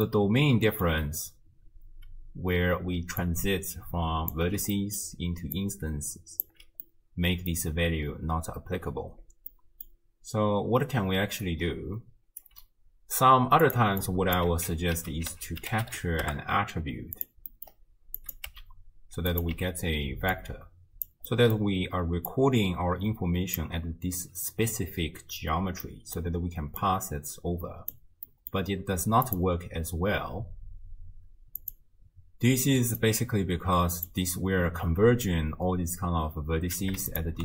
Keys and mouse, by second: 0.2 click, 1.0-4.6 d, 3.2-4.3 drag, 4.9 click, 5.6 click, 5.6 d, 6.5 d, 7.0 click, 7.0 d, 9.6 click, 11.2 d, 11.4-12.4 drag, 12.4 d, 14.0 click, 14.0 d, 14.5 ctrl+x, 15.0 ctrl+a, 17.6 click, 18.3-18.8 drag, 19.4 drag, 20.4-21.1 drag, 21.4 click, 21.8-23.8 d, 22.3-23.6 drag, 26.0 middle click, 26.8-28.0 drag, 28.4 middle click, 29.3 click, 31.6 click, 33.0 click, 33.3 click, 37.1 ctrl+shift+click.